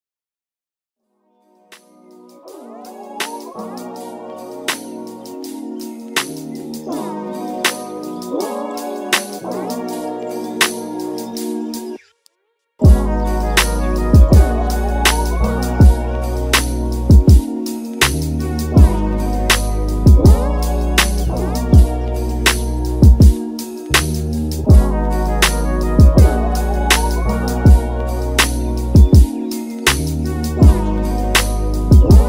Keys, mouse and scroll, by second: 9.6 Delete, 12.9 click, 15.2 ctrl+s, 22.5 click, 27.1-32.2 drag.